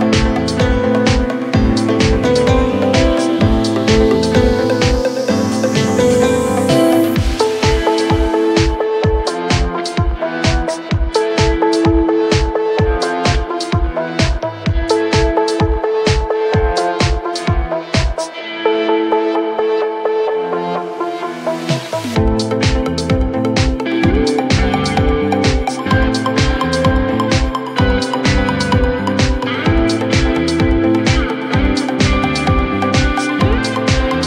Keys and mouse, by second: 2.0 click, 2.8 click, 4.7 click, 6.9-11.6 drag, 12.0 alt+middle click, 12.9 w, 13.9 click, 16.7-18.3 drag, 18.7-21.2 drag, 23.5 3, 24.6 click, 25.5 click, 26.0 alt+click, 27.1 r, 28.5 click, 28.9-31.3 drag, 31.9 alt+click, 32.7 alt+click, 33.1 4.